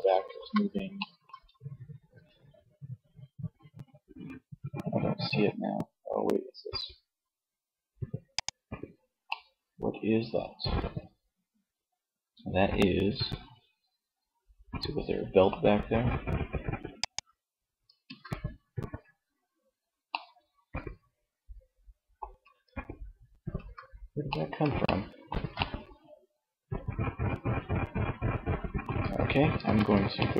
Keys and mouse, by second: 1.3 r, 7.5 click, 8.4-9.5 middle drag, 11.6-12.7 middle drag, 13.5 middle click, 15.0 r, 16.3 click, 17.1 Tab, 21.6 Tab, 22.7 Tab, 28.8 Tab, 29.8 Tab.